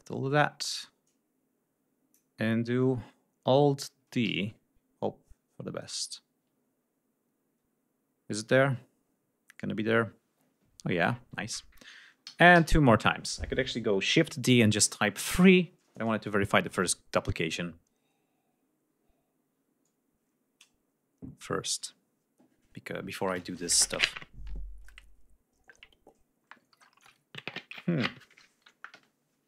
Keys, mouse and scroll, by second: 2.6 ctrl+scroll up 2, 3.2 ctrl+scroll down 2, 3.8 ctrl+alt+d, 8.9 scroll down 2, 10.5-11.1 ctrl+scroll down 4, 11.8 alt+d.